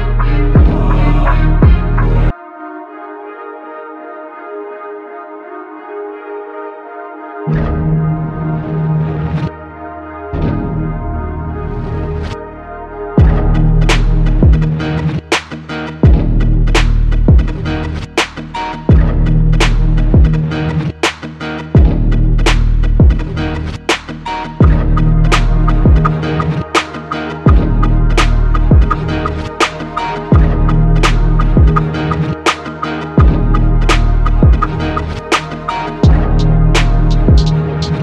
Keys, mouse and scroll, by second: 1.2 ctrl+r, 3.1 ctrl+r, 4.6 ctrl+r, 4.7 ctrl+r, 6.4 ctrl+r, 8.2 ctrl+r, 10.2 ctrl+r, 10.3 ctrl+r, 12.1 ctrl+r, 13.9 ctrl+r, 15.7 ctrl+r, 16.9 ctrl+r, 20.4 ctrl+r, 23.1 ctrl+r, 25.2 ctrl+r, 26.1 ctrl+r, 28.2 ctrl+r.